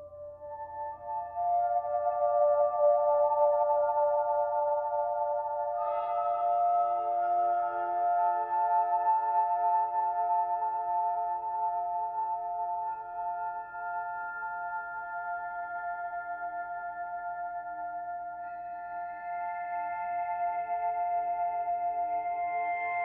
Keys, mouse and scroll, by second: 0.1 b, 0.4 g, 1.4 click, 1.6 b, 2.0 g, 3.5 s, 4.6 ctrl+z, 5.0 g, 5.9 s, 6.3 g, 6.7 shift+middle click, 7.2 click, 7.5 b, 8.4 g, 10.2 z, 10.8 z, 11.3 click, 11.4 b, 11.8 g, 13.8 z, 14.1 scroll down 3, 14.2 middle click, 14.3 scroll up 1, 14.4 Tab, 14.7-15.2 scroll down 5, 15.2-15.7 scroll up 6, 16.3 2, 16.4 click, 16.7 g, 17.9 shift+click, 18.4 g, 19.6 Tab, 19.7 scroll down 5, 19.8-20.5 middle drag, 20.0 scroll up 1, 20.2 scroll down 3, 20.5 b, 21.0 o, 22.6 ctrl+s.